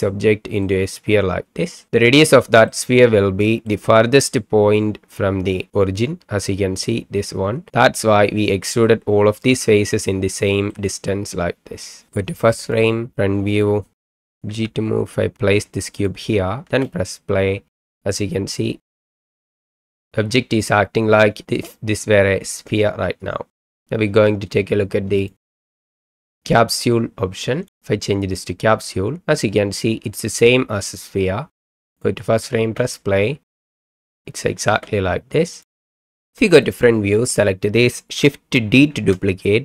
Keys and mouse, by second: 0.7-1.9 middle drag, 2.8-3.7 middle drag, 8.5-8.9 middle drag, 9.5-10.8 middle drag, 13.1 KP_1, 14.5 g, 16.7 space, 19.0 space, 19.4-20.0 middle drag, 25.2 click, 25.5 click, 25.9 click, 26.0-27.7 drag, 28.9-29.2 middle drag, 32.0 click, 32.6 space, 34.7 space, 35.5 click, 36.4 KP_1, 37.3 click, 38.9 shift+d.